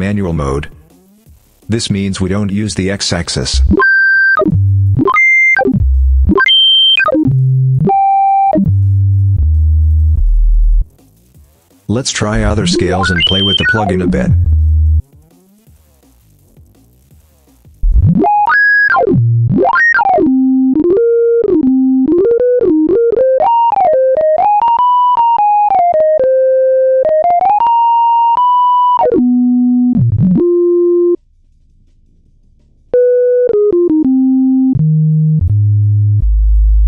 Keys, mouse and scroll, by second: 1.8-3.0 drag, 3.3-10.8 drag, 11.4 click, 12.1-15.0 drag, 16.5 click, 17.6-31.1 drag, 31.9 click, 32.7-36.8 drag.